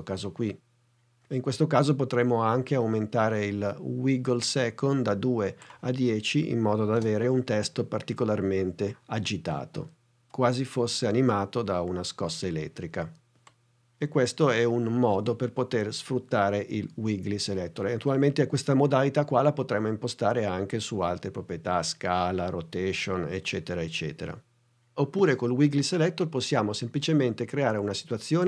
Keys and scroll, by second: 7.0 space.